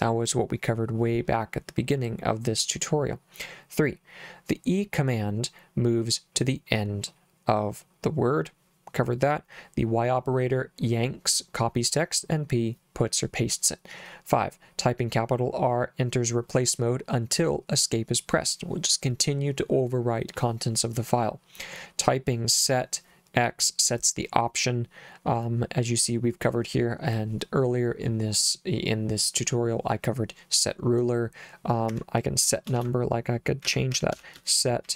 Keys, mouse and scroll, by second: 32.0 Escape, 32.8-34.9 typing.